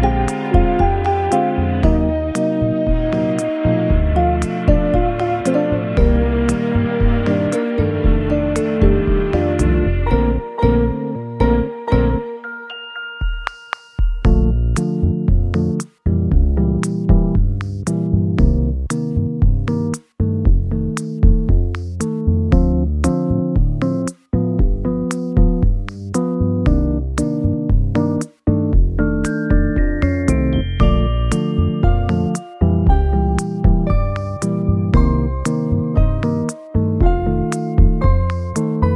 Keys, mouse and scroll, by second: 3.1 scroll up 4, 3.5 middle click, 4.7-5.8 scroll up 5, 5.8 middle click, 8.6-9.2 scroll up 1, 11.1 shift+click, 12.0 shift+click, 13.1 ctrl+l, 15.7 shift+click, 19.4 shift+click, 24.1 shift+click, 25.2 ctrl+l, 26.9 scroll down 2, 27.8 scroll down 1, 28.0 KP_0, 29.6-30.4 scroll down 5, 30.7 scroll up 2, 33.4-33.8 scroll down 2.